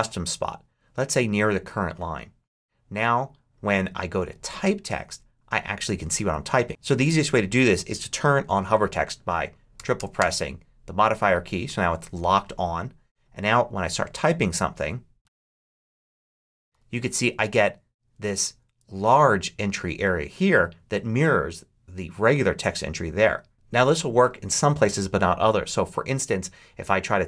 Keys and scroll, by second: 14.9-17.1 typing.